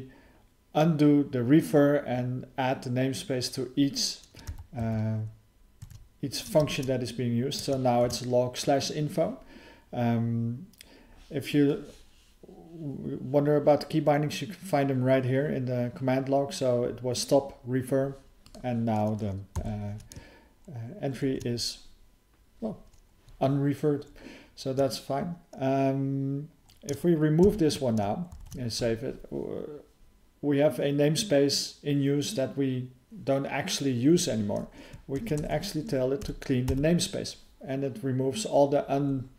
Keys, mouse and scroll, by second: 6.6 ctrl+alt+space, 8.0 ctrl+g, 18.4 click, 18.5 click, 27.4 ctrl+k, 28.4 ctrl+s.